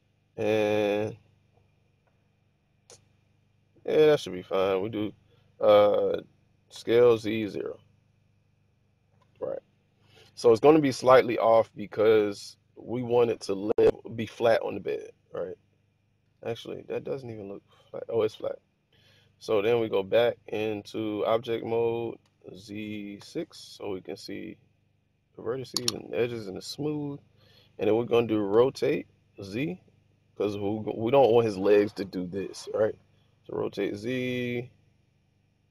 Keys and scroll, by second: 4.0 typing, 6.4-7.8 typing, 8.8-9.6 typing, 19.5 Tab, 22.1 z, 23.1 6, 28.4 r, 29.2 z.